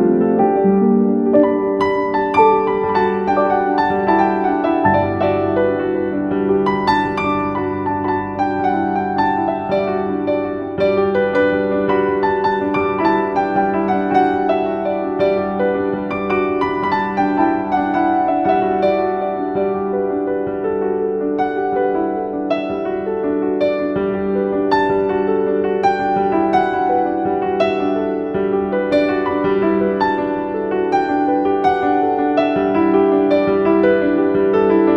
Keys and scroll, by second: 2.5 F4, 2.9 Escape, 3.3 F2, 6.9 l, 7.3 Escape, 9.3 ctrl+r, 24.1 F4, 24.4 Escape.